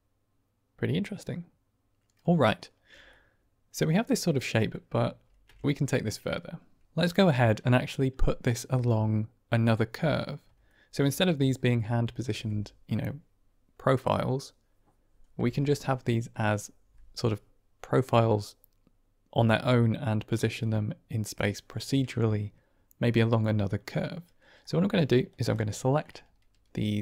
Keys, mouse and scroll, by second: 3.0-3.8 middle drag, 4.4 middle drag, 5.1 ctrl+space, 10.6 shift+middle drag, 24.5-24.9 middle drag, 25.2 drag, 25.6 shift+middle drag, 25.8 shift+click.